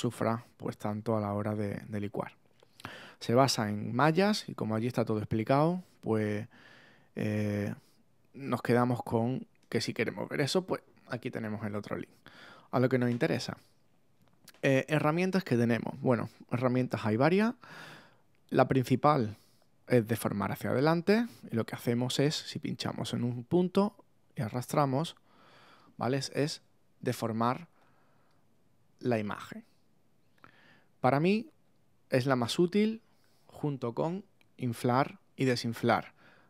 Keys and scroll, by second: 26.5 super+z, 28.8 super+z.